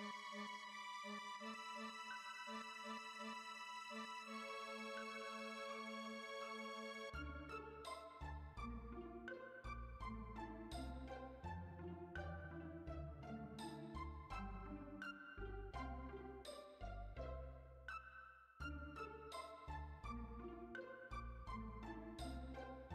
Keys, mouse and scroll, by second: 6.7-13.5 middle drag, 14.8 click, 21.9 click, 22.8-22.9 middle drag.